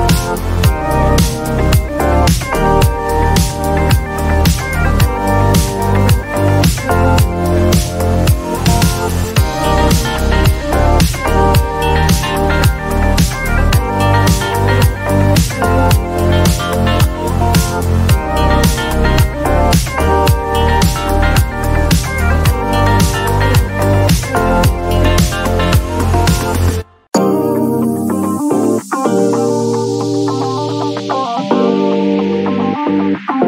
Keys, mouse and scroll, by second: 0.6-1.2 scroll down 6, 0.7 click, 2.3 click, 2.8 click, 4.2-5.1 scroll up 8, 5.1-5.6 scroll, 5.8 click, 5.8-6.3 scroll up 1, 6.3 click, 6.8 click, 7.4 click, 8.1 click, 10.2 click, 11.1-13.4 scroll, 13.4 click, 14.2-14.6 scroll, 19.7 click, 22.1 click, 24.0 click, 26.3 click, 27.7 click, 29.3 click.